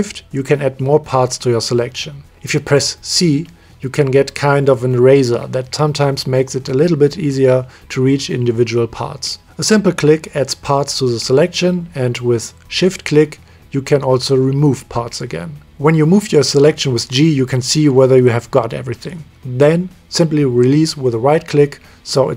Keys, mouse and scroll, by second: 0.6 middle click, 0.9 c, 8.5-11.0 shift+middle drag, 11.2 middle click, 11.4 middle click, 11.5 middle click, 11.8 click, 12.5 c, 13.8 middle click, 14.4 middle click, 14.8 middle click, 15.0 middle drag, 15.2 middle click, 15.3 middle click, 15.5-16.0 shift+middle drag, 15.8 c, 16.1 middle click, 16.4 middle click, 16.6 middle click, 16.9 middle click, 17.1 g, 21.1-21.5 middle drag, 21.7-22.3 middle drag.